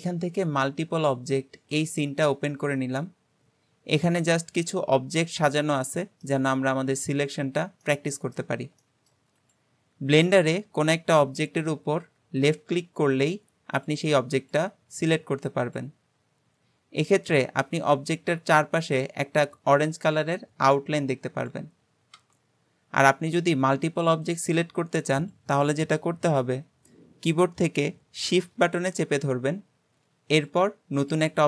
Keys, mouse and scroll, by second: 2.7 scroll down 2, 4.0-6.6 middle drag, 6.6-7.3 scroll up 2, 7.3-7.9 scroll up 1, 7.9-9.4 middle drag, 9.4 click, 12.4 click, 13.2 click, 13.8 click, 14.4 click, 15.0 click, 15.7 click, 16.9-21.4 scroll up 2, 22.9-24.3 scroll down 3, 24.3 click, 25.3 click, 30.4 shift+click, 31.0 shift+click.